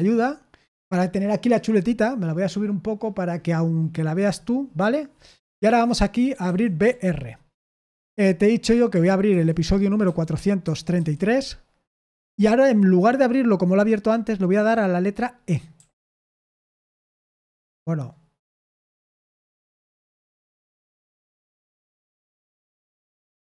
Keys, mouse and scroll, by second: 3.2-5.8 scroll down 1, 5.8-6.4 scroll down 1, 6.4-6.8 typing, 7.5 Return, 9.3-10.9 typing, 15.7 typing, 17.6 BackSpace.